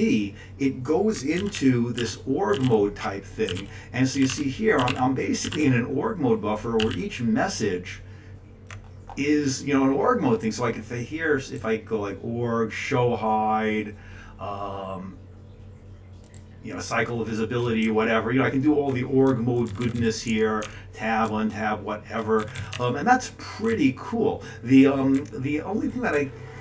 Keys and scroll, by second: 1.3 ctrl+c, 1.5 ctrl+p, 2.0 ctrl+c, 2.1 ctrl+p, 2.6 ctrl+c, 3.6 ctrl+p, 4.1 ctrl+c, 4.3 ctrl+p, 4.8 ctrl+c, 4.9 ctrl+n, 5.4 ctrl+c, 5.5 ctrl+n, 6.8 ctrl+c, 6.9 ctrl+n, 18.0 Up, 18.3 Up, 18.4-19.1 Up, 19.3 Down, 19.7 Down, 19.8 Down, 19.9 Down, 20.3 Tab, 20.6 Tab, 21.7 Down, 21.8 Down, 22.7 Down, 23.7 Down, 24.4 Down, 26.1 Tab.